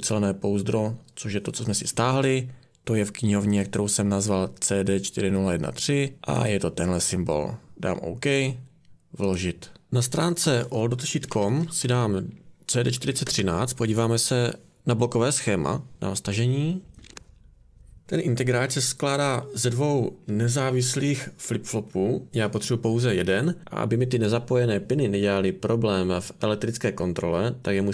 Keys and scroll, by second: 10.9-13.4 typing, 16.8-17.6 typing.